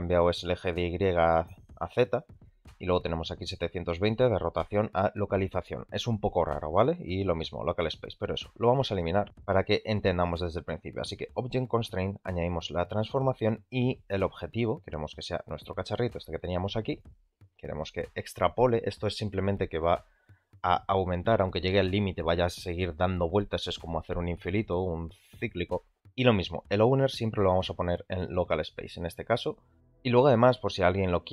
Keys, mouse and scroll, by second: 9.5-9.9 middle drag, 11.3-13.0 drag, 18.4 click, 26.6-28.3 drag.